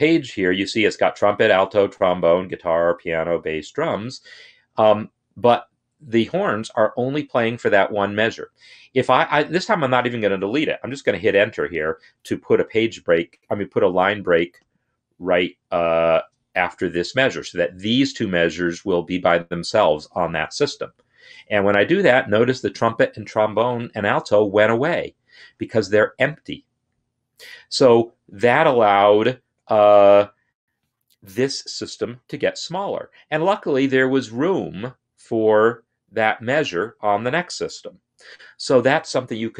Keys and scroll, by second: 20.5 Return.